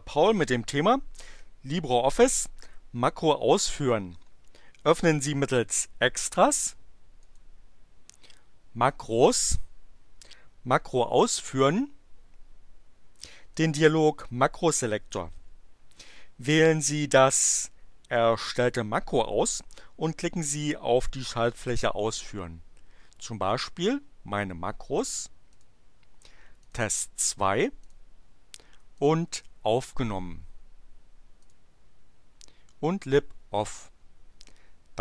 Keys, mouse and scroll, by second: 7.2 click, 13.5 click, 25.5 click, 26.6 click, 27.8 click, 29.0 click, 31.4 click.